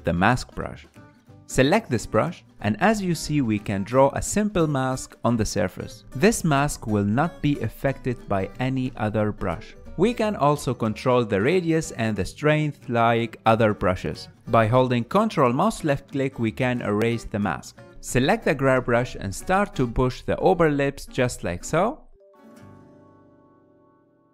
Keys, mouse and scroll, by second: 0.4 m, 2.4 f, 4.1-11.1 drag, 13.6 ctrl+middle click, 14.4-17.6 ctrl+drag, 17.6-18.9 ctrl+middle drag, 18.9-22.3 drag, 22.3 f, 23.6-24.3 drag.